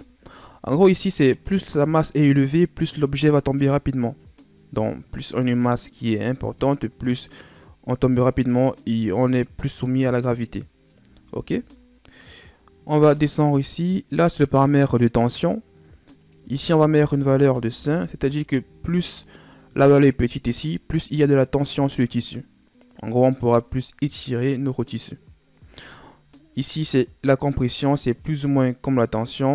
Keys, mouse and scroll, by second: 2.9-5.9 middle drag, 9.2-10.0 scroll down 4, 10.0-10.6 scroll down 1, 10.6 middle click, 11.1 scroll up 1, 11.7-12.4 scroll up 1, 12.9 scroll down 2, 13.6-16.1 scroll down 3, 16.1-19.1 drag.